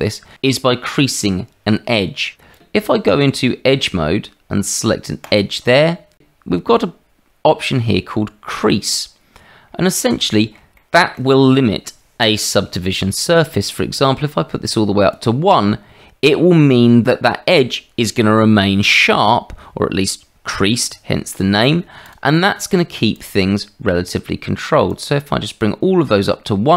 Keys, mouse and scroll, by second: 2.9 Tab, 5.3 click, 10.2 shift+click, 10.7 click, 14.2-15.2 drag, 25.0 click.